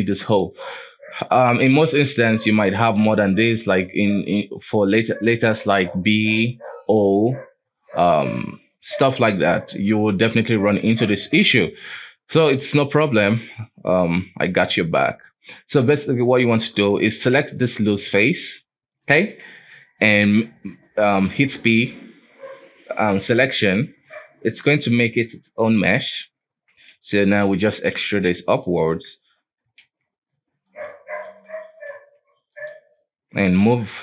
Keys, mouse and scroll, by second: 0.6-1.2 scroll down 6, 1.2 middle click, 1.8-2.3 scroll up 2, 2.3-5.5 middle drag, 9.3-9.7 scroll down 3, 9.7 middle click, 10.0-11.2 scroll up 1, 11.2 space, 11.9-13.5 middle drag, 13.5-14.5 scroll up 2, 14.5 middle click, 15.0-16.5 scroll up 3, 16.5-17.0 scroll down 3, 17.0 g, 17.9 middle click, 18.7-19.0 scroll down 1, 19.0 middle click, 19.7 p, 23.9 middle click, 24.1 Tab, 24.6 right click, 25.0 middle click, 25.3 scroll up 1, 25.5 g, 26.5 Tab, 26.9 a, 27.5 e, 28.8 Tab, 29.5 scroll down 1, 29.7 space, 30.7 right click, 31.3 right click, 32.0 q, 33.7-34.0 drag.